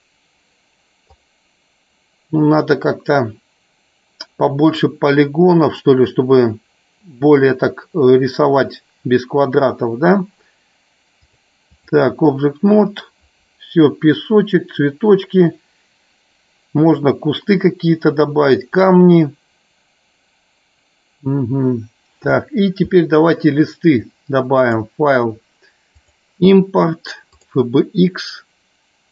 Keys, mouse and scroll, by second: 1.1 click, 11.2-12.3 drag, 13.2-13.9 drag, 24.6-28.0 drag.